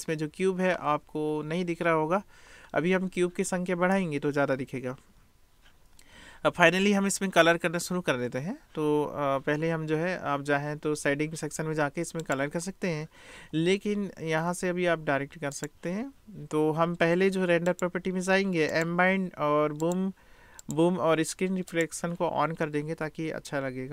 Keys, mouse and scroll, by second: 12.3 click, 17.7 click, 18.8 click, 19.8 click, 20.6 click, 21.7 click.